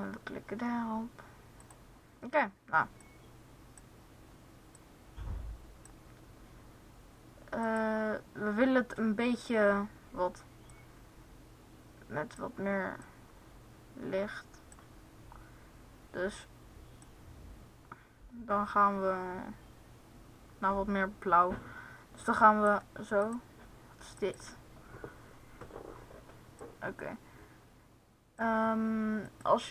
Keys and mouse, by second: 0.1-1.6 drag, 3.3 click, 7.8-9.2 drag, 29.5 click.